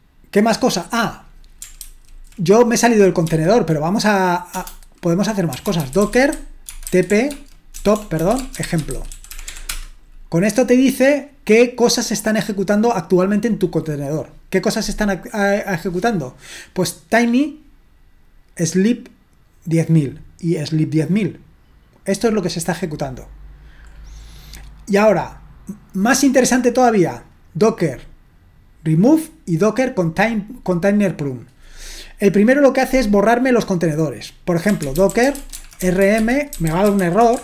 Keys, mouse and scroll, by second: 0.8-1.8 drag, 1.8 ctrl+c, 3.2 d, 4.5-10.0 typing, 26.2 click, 31.2 click, 34.5-37.4 typing.